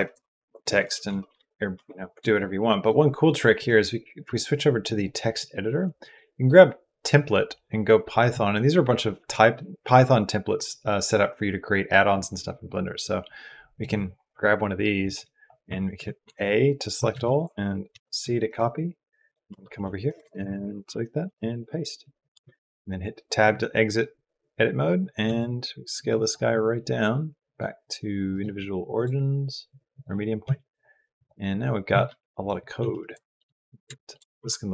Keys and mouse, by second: 0.0-1.2 typing, 1.5 Tab, 3.4-4.7 drag, 5.8-8.6 drag, 12.8 click, 16.9 ctrl+a, 17.7 ctrl+c, 18.3 click, 19.3 Tab, 19.9 BackSpace, 20.0 BackSpace, 20.2 BackSpace, 20.5 BackSpace, 21.2 ctrl+v, 22.3 Tab, 25.0 s, 27.3 click, 28.7-29.8 drag, 30.2 s, 31.0 click, 31.7 g, 32.7 s, 33.1 shift+middle click, 33.5-34.7 shift+middle drag, 34.1 g.